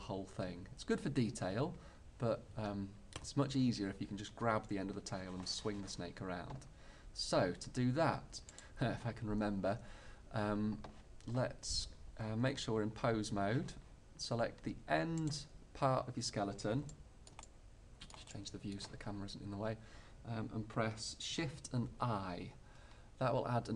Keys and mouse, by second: 8.6-10.5 right drag, 15.2 right click, 17.0-19.8 middle drag, 19.8-21.9 right drag, 21.9 shift+i.